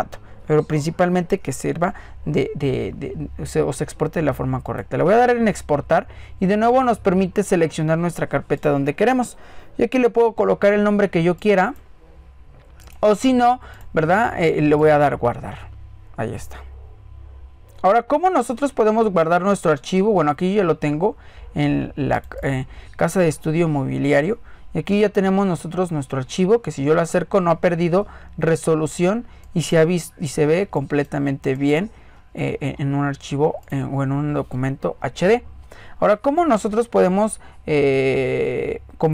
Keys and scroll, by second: 36.1 ctrl+z.